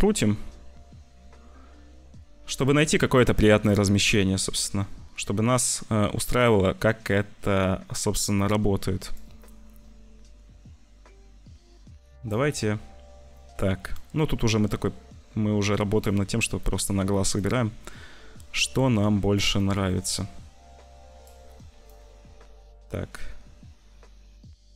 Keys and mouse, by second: 1.7-2.8 middle drag, 3.7 middle click, 4.3 middle click, 5.6 middle click, 9.1 middle click, 11.0-12.2 middle drag, 14.0 middle click, 15.8 click, 16.7 shift+click, 17.4 shift+click, 18.1 shift+middle click, 18.3 shift+click, 19.7 click, 20.0-21.2 drag, 21.8 click.